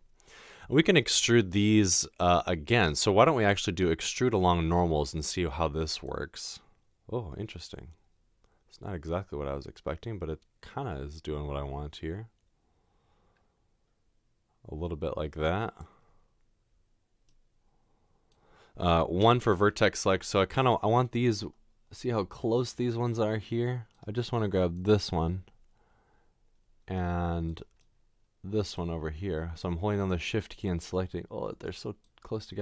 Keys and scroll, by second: 20.4 1.